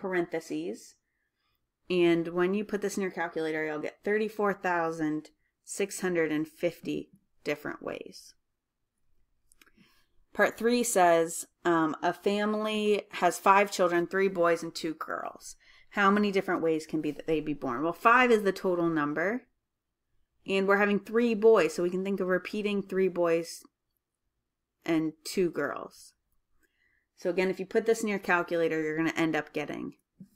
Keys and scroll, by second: 1.6-2.3 typing, 12.5-13.3 typing.